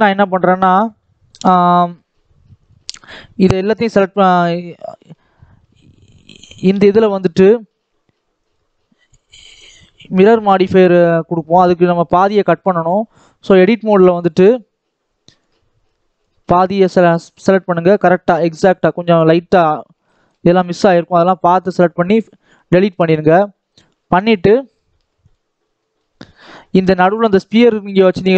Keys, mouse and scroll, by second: 1.6 middle click, 2.0-2.4 scroll up 1, 2.4 click, 3.9-4.9 scroll down 1, 4.9 KP_1, 5.2-5.6 scroll up 2, 5.7 click, 6.3-8.4 drag, 9.5-10.2 scroll up 1, 10.2-10.7 scroll up 1, 10.7-11.9 shift+middle drag, 11.9-15.8 drag, 16.9-17.4 scroll up 4, 17.4 shift+middle click, 18.3 shift+click, 19.9 shift+click, 20.6 x, 21.8-22.3 scroll down 4, 22.6-23.6 scroll down 9, 23.6-25.5 drag, 25.5 scroll down 3, 25.7 middle click, 26.0-27.5 scroll up 1, 27.5 click, 28.1 click.